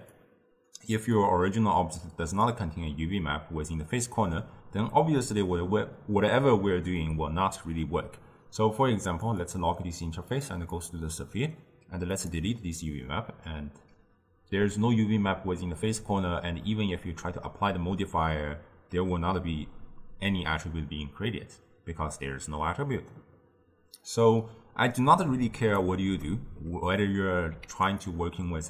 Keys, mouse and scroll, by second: 1.2-4.3 drag, 9.3 click, 10.4 drag, 10.8 click, 12.2-15.2 drag, 16.7-19.8 middle drag, 25.3-26.3 drag, 26.3-28.6 shift+middle drag.